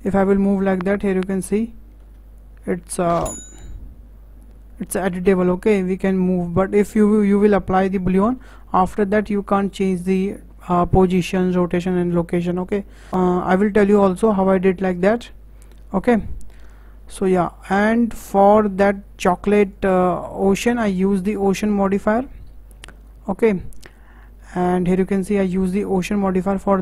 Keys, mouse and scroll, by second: 16.9-17.4 scroll down 5, 17.4 shift+middle drag, 17.7 scroll down 4, 17.9 shift+middle click, 18.3 scroll down 4, 18.5-18.8 middle drag, 18.8-19.7 scroll up 3, 19.7 click, 20.0-20.4 scroll up 6, 20.4 shift+middle click, 20.8 scroll down 2, 21.1-24.5 shift+middle drag.